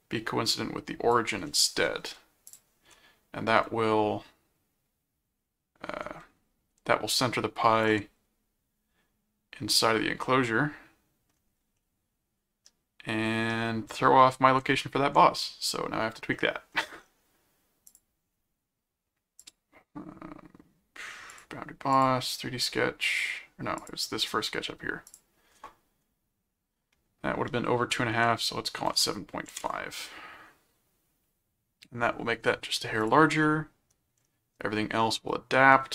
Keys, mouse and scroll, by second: 2.5 click, 6.0 ctrl+Tab, 7.8 ctrl+click, 10.2-11.3 middle drag, 11.7-13.5 middle drag, 14.6 ctrl+Tab, 16.3 middle click, 17.9 click, 19.4 click, 21.3 click, 21.9 click, 23.8 click, 25.1 click, 33.0 click, 33.4 middle click, 35.7-35.9 middle drag.